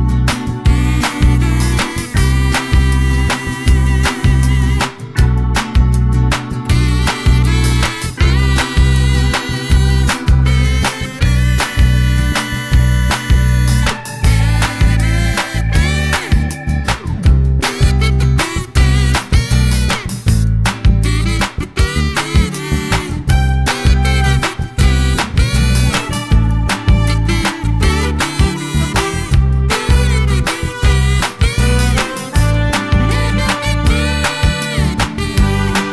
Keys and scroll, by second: 21.6 d.